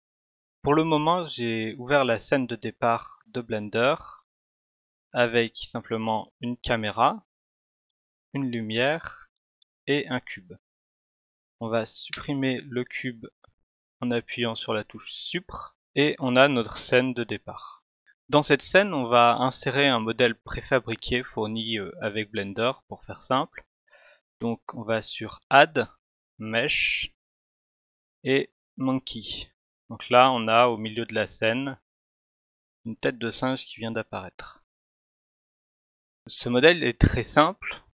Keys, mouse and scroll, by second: 3.3 click, 6.4 click, 8.0 click, 9.4 click, 12.1 Delete, 21.4 click, 28.6 click.